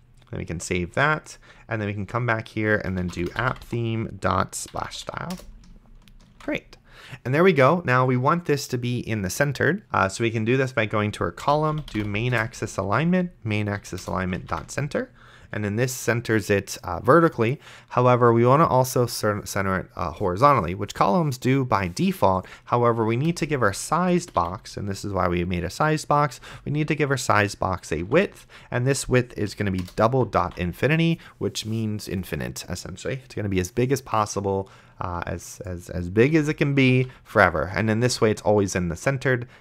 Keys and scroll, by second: 2.9-4.2 typing, 4.7 Down, 5.3 Return, 6.6 ctrl+s, 11.5-12.8 typing, 13.8 Down, 14.0 Return, 14.7 ctrl+s, 23.6 Return, 24.0-24.9 typing, 26.4 Return, 28.0 d, 29.5 Down, 29.8 Return, 30.7 ctrl+s, 36.6 ,, 37.2 ctrl+s.